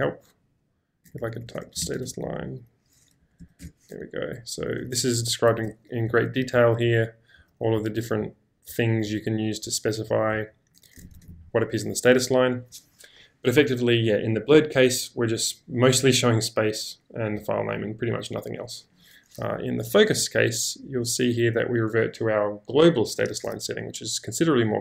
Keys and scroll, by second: 0.0-2.5 typing, 4.9 typing, 5.5 ctrl+h, 6.1 ctrl+d, 11.2 space, 11.2 q, 20.1-21.0 typing.